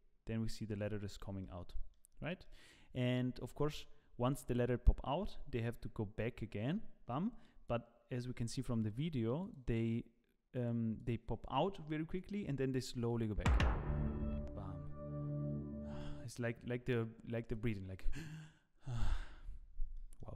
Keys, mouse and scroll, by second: 0.9 click, 1.4 middle click, 2.1 scroll up 2, 2.4 middle click, 5.7 click, 20.0 middle click.